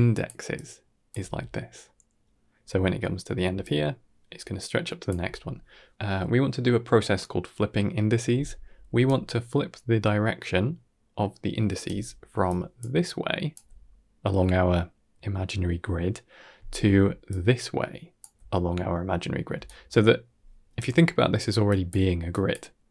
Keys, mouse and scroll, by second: 0.0-1.0 typing, 0.4 click, 3.4 d, 3.5-5.0 drag, 5.0 d, 5.1 d, 8.8 d, 8.9-11.9 right drag, 12.2-13.5 typing, 12.3 click, 16.7 d, 17.2 click, 18.1 d, 18.2 d, 19.4 d, 19.5 right click, 20.6-22.9 typing, 21.5 click, 22.2 click.